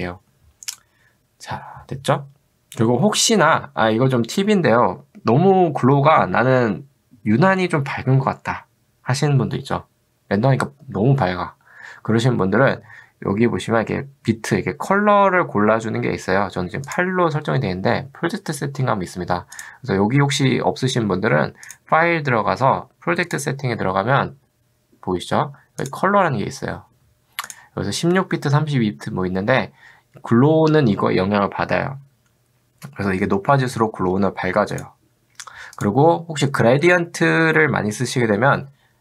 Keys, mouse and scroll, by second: 23.3 click, 25.8 click, 34.8 click.